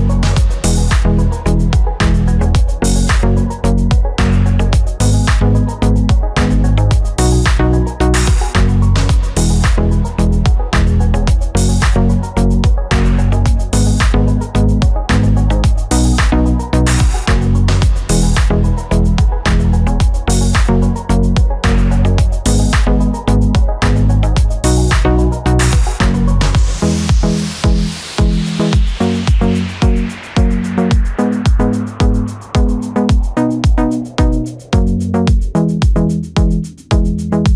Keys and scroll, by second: 5.5 ], 7.9 ctrl+-, 19.5 ctrl+-, 20.7 ctrl+-, 24.1 ctrl+-, 24.9 ], 26.1 space, 27.6 ], 30.3 ], 31.3 ctrl+alt+z.